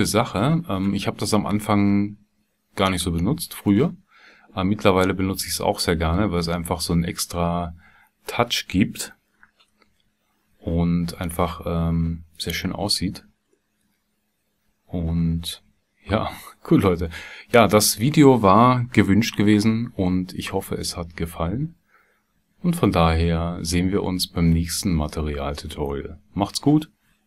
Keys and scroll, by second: 9.8 KP_Divide.